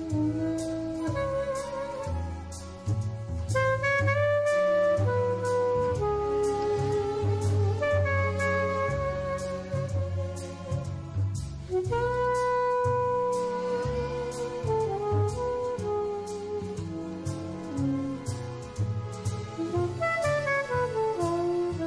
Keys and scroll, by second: 5.9 super+space, 12.1 alt+super+space, 15.5 super+space, 17.5 super+z.